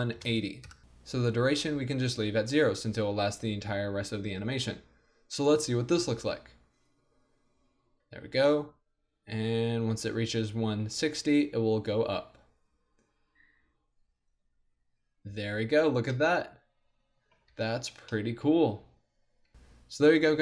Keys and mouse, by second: 6.2 alt+a, 9.7-15.9 middle drag, 17.6 alt+a, 19.9 middle click.